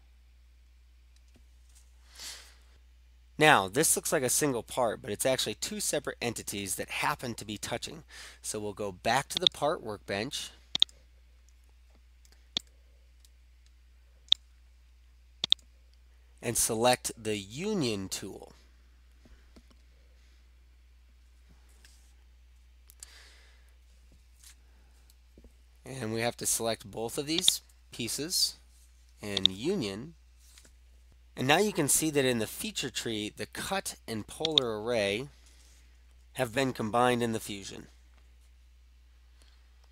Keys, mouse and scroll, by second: 0.3 scroll up 1, 0.7 scroll, 0.8 scroll up 2, 9.6 click, 10.9 click, 14.3 middle click, 14.4 right click, 15.6 click, 27.1 click, 27.6 ctrl+click, 29.5 click, 34.6 click.